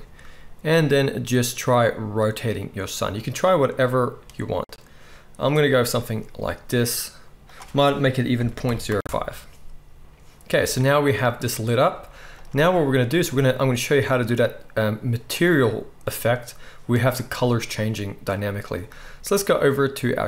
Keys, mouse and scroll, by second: 11.9-20.2 drag, 11.9-13.3 middle drag, 11.9-13.3 right drag, 11.9 z.